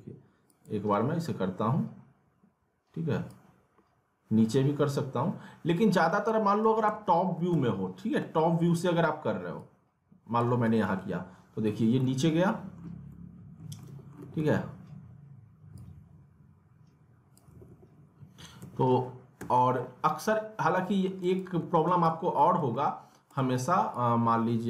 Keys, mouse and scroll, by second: 3.3-6.6 drag, 6.6 ctrl+z, 7.1 alt+w, 7.5 z, 7.9-8.5 scroll down 2, 8.2 middle click, 9.5 click, 10.7 alt+w, 12.0 alt+middle click, 12.9 scroll up 1, 13.1 alt+middle click, 13.9 alt+w, 15.7-17.5 drag, 17.5 alt+w, 18.6 ctrl+z, 20.0 scroll down 1, 20.8 alt+middle click, 21.2-22.4 typing, 21.2 click, 22.1 alt+middle click, 22.7 alt+middle click, 23.1 scroll down 1, 23.3-24.6 drag.